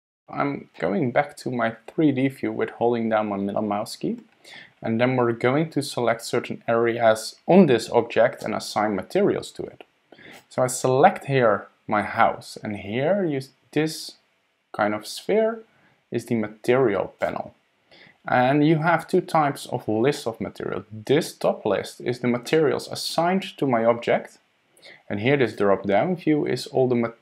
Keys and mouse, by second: 0.8-4.1 drag, 4.1 middle click, 10.3 middle click, 17.2-27.2 middle drag.